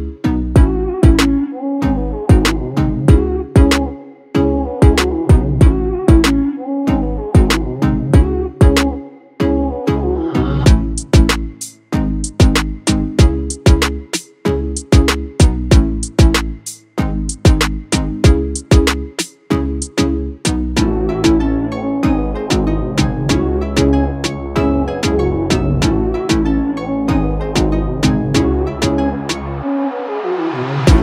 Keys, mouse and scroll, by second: 1.2 alt+scroll down 1, 1.6 space, 1.7 click, 2.2-8.3 ctrl+drag, 8.3-11.7 alt+drag, 11.7-14.6 drag, 14.6 click, 15.9-22.0 drag, 22.0 space, 22.1 click, 22.4 space, 24.3-26.3 drag, 26.8 ctrl+space, 27.2 ctrl+click, 27.4 ctrl+space, 27.6 click.